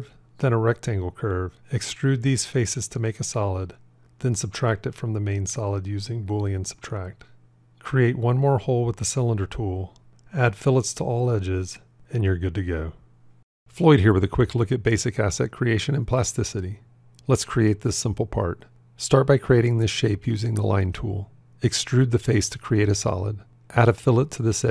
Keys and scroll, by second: 5.5 q.